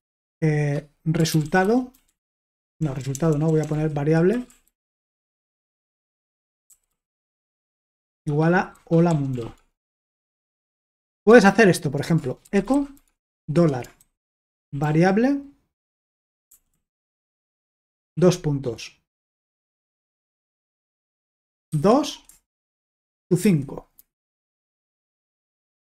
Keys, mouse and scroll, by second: 1.0-15.3 typing, 16.5-18.6 typing, 21.7 typing, 23.2-24.2 typing, 24.7 Return.